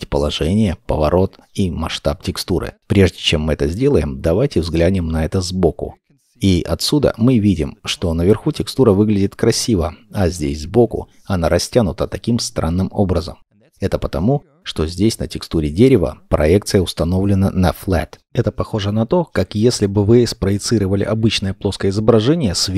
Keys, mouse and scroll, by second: 1.7 0, 1.8 Return, 3.2 middle click.